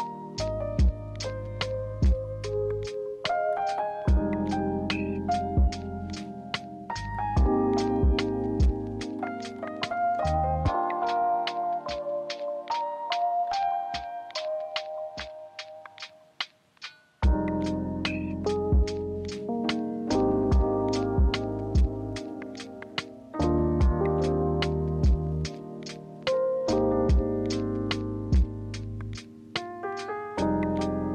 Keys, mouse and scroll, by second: 15.2 ctrl+alt+a, 23.9 ctrl+z, 25.1 ctrl+z, 27.6 ctrl+z, 29.6 ctrl+z, 30.3 alt+Tab.